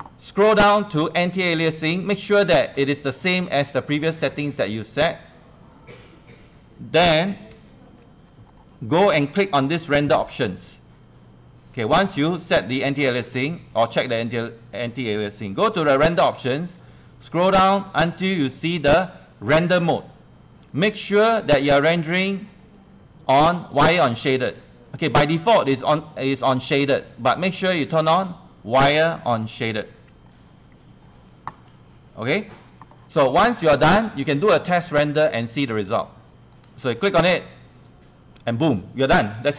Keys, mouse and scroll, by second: 1.5 click, 7.5 ctrl+1, 7.6 ctrl+1, 8.5 click, 9.2 ctrl+click, 11.0 Escape, 13.2 click, 13.8 scroll down 1, 16.0 scroll down 1, 21.2-34.8 drag, 36.6 click.